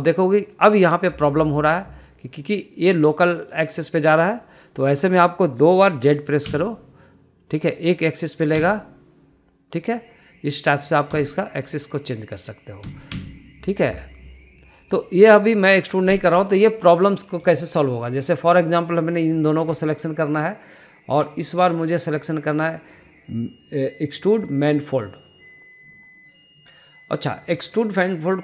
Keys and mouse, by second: 0.3 e, 7.5 z, 12.1 z, 13.8 z, 14.1 z, 16.5 middle click, 17.2 shift+middle click, 17.4 shift+middle click, 18.0 middle click, 18.6 shift+middle click, 19.2 click, 20.0 shift+click, 20.4 middle click, 20.8 shift+middle click, 22.5-28.4 drag.